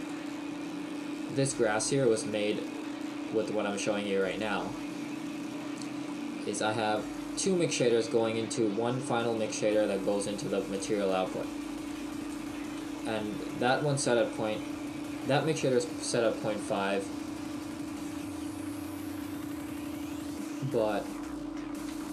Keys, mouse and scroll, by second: 5.1-22.1 scroll up 1.